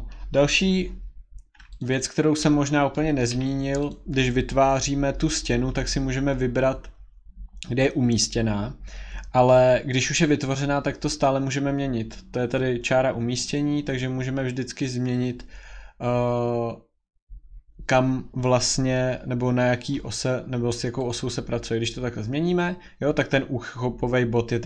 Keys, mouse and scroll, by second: 0.7 scroll, 1.8 click, 2.0 click, 2.4 scroll, 3.2 middle click, 3.3 Escape, 3.5-3.9 scroll, 3.9 click, 8.3 scroll, 13.5 middle click, 13.7-18.7 drag, 21.1-24.6 drag.